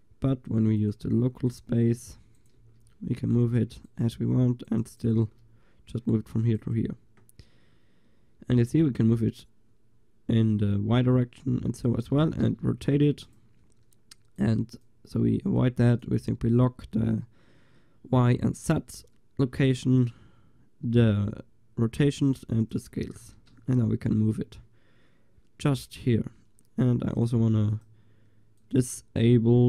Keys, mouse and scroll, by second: 0.5-2.7 drag, 2.4-4.2 right drag, 2.7 g, 4.7-6.9 right drag, 8.7 g, 12.3 r, 14.4-24.3 drag, 23.2 ctrl+s, 23.7 g, 24.3-27.2 middle drag, 27.2-29.6 drag.